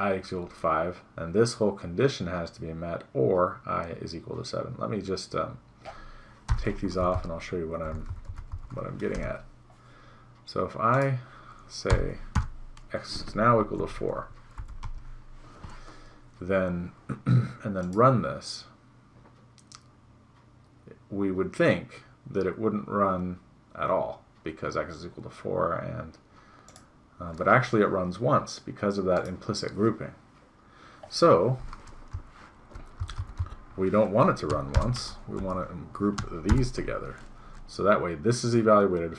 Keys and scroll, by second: 6.5 BackSpace, 7.2 Right, 7.8 Right, 9.3 BackSpace, 13.8 ctrl+s, 14.7 End, 14.8 Delete, 32.2 Right, 35.5 End.